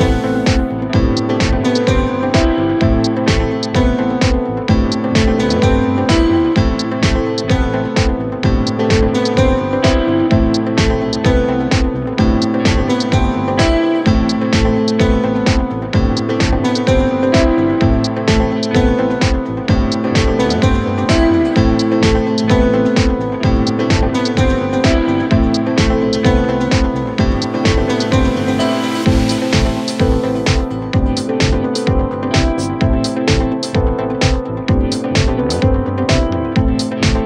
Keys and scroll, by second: 3.4 4, 4.2 3, 4.8 ], 7.3 5, 12.4 f, 15.0 ], 17.5 Delete, 18.0 Delete, 26.2 ., 30.0 4, 31.3 3, 31.5 ], 33.0 4.